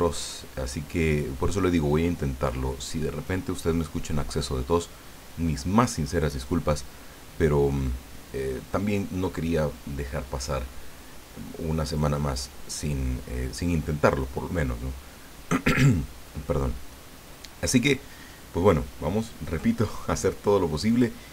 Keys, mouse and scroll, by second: 20.9 click.